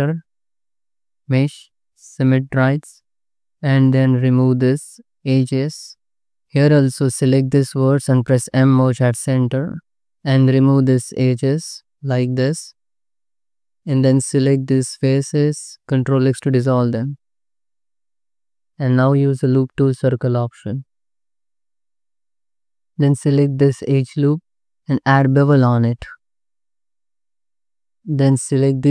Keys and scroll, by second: 0.3 2, 1.0 a, 3.2 2, 5.4 ctrl+x, 6.1 ctrl+z, 6.3 1, 7.8 m, 10.1 m, 10.5 2, 12.6 ctrl+x, 14.4 3, 16.8 ctrl+x, 18.8 3, 22.9 2, 25.1 ctrl+b, 26.8 5, 28.6 ctrl+-.